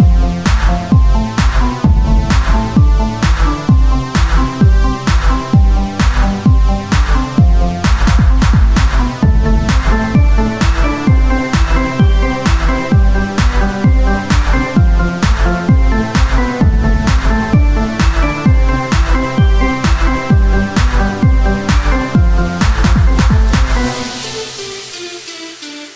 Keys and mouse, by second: 1.3 KP_1, 2.4 z, 3.1 r, 3.7 z, 5.1 click, 6.8 z, 10.3 r, 11.4-14.1 drag, 12.0 z, 13.3 e, 18.9-25.1 drag, 25.7-25.9 drag.